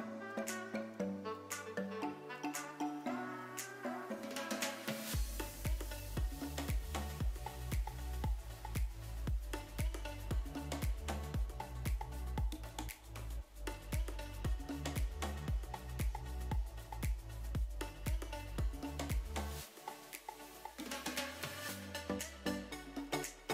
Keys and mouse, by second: 0.4 space, 2.3 click, 4.9 click, 5.8 g, 7.5 drag, 8.2 g, 9.3 click, 22.9 0.